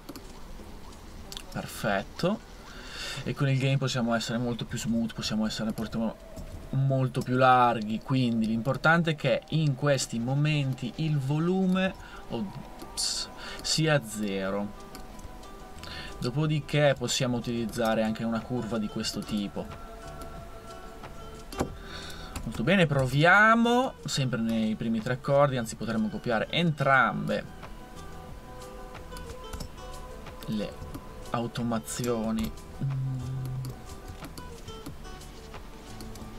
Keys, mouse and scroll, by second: 4.7 super+1, 5.0 super+1, 5.3 super+1, 5.5 super+1, 11.9 super+z, 22.4 super+2, 22.6 super+2, 23.0 super+2, 29.5 super+d, 32.4 super+d.